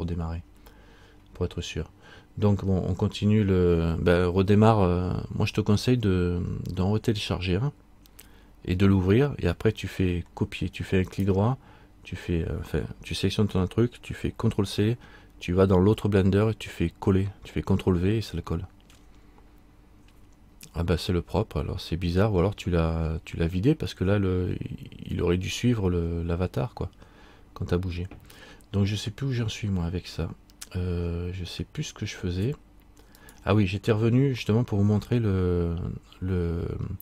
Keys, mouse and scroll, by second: 11.2 right click, 31.4-31.9 scroll up 1, 33.3 right click, 33.3-35.2 scroll up 3.